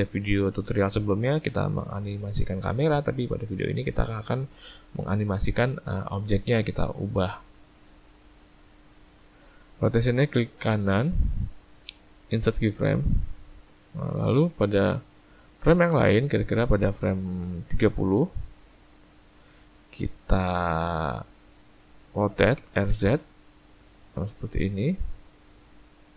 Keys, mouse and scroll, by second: 10.9 right click, 15.0 click.